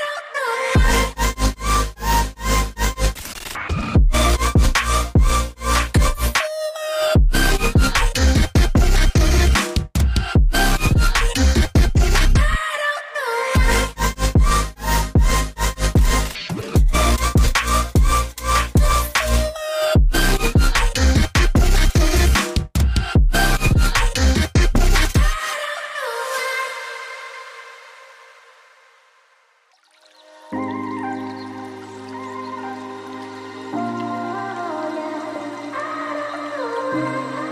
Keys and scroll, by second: 0.0-4.8 typing, 14.9-15.4 typing, 16.8 v, 21.8 ctrl+3, 22.8 ctrl+3, 23.7 ctrl+alt+3, 25.6 z, 27.1 v, 33.7 ctrl+x, 34.2 ctrl+f.